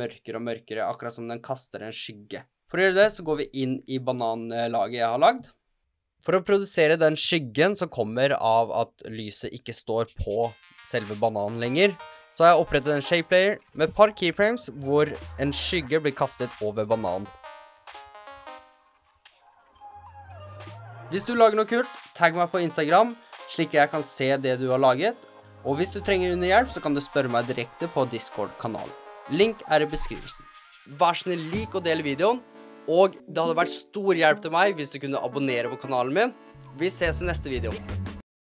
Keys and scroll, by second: 5.8 u.